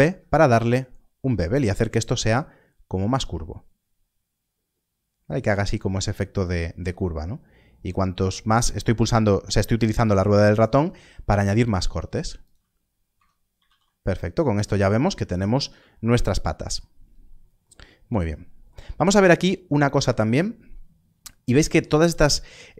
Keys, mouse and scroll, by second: 3.1 ctrl+b, 5.9-6.3 scroll up 1, 12.4 click, 13.1 Tab, 13.6 alt+a, 14.0 scroll down 1, 19.2 click, 20.8-21.5 scroll up 1.